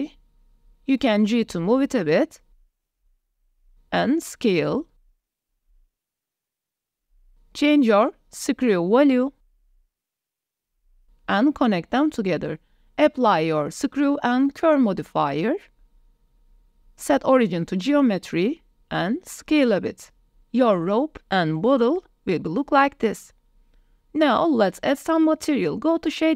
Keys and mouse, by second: 0.7 shift+d, 5.0 s, 7.1 click, 7.4 g, 8.8 click, 10.7-12.9 drag, 12.9 middle drag, 13.2-13.5 drag, 13.7 click, 14.6-15.7 drag, 16.7-17.4 drag, 17.7 drag, 18.0 s, 18.4-19.8 drag, 20.1 click, 20.5 s, 21.9 click, 22.3 g, 22.6 z, 23.7 ctrl+s.